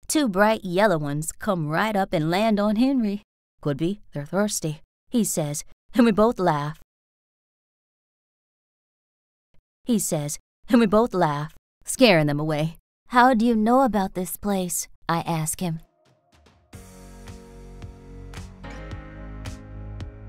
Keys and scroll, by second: 2.8 r, 6.4 s, 6.7 space, 8.1 ctrl+z, 9.4 space, 9.7 r, 14.1 r, 17.0 s.